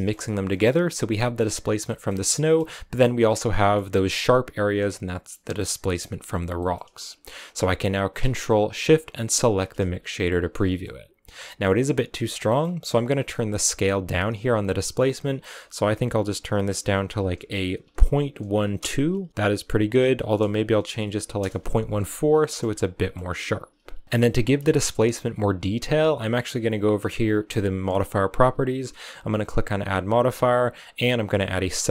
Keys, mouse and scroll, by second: 0.4-1.0 scroll up 2, 1.0 middle click, 2.0 scroll down 2, 2.2-6.3 shift+middle drag, 6.3 scroll down 2, 6.4-9.3 middle drag, 9.3 ctrl+shift+click, 10.3 scroll down 2, 10.4-12.1 middle drag, 12.1 scroll up 5, 12.3-15.1 middle drag, 15.1-18.7 drag, 19.4-22.3 drag, 22.3 shift+middle click, 22.6 scroll up 1, 22.6-26.9 middle drag, 28.7-31.7 drag.